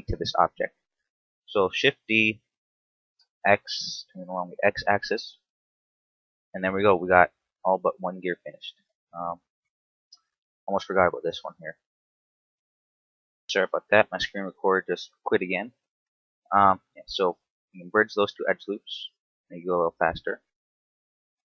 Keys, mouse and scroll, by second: 1.9 shift+d, 4.6 ctrl+click, 4.9 Tab, 5.2 scroll down 3, 5.7 shift+middle click, 6.4 scroll down 2, 6.9 shift+middle click, 7.8 right click, 8.2 Tab, 8.3 scroll up 3, 8.8 shift+middle click, 9.4 a, 10.2 right click, 10.7 shift+right click, 11.2 right click, 12.3 shift+right click, 12.7 shift+right click, 13.1 shift+right click, 16.5-17.1 scroll down 1, 17.1 space, 18.8 scroll down 2, 19.7-20.1 scroll down 2, 20.1 middle click, 21.2-21.5 scroll up 5.